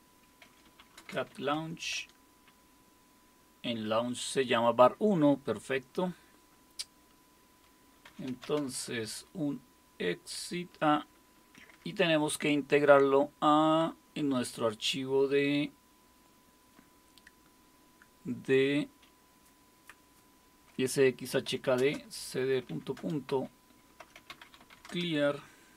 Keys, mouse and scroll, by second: 0.0-2.5 typing, 7.8-9.1 typing, 11.2-11.5 typing, 21.2-25.7 typing.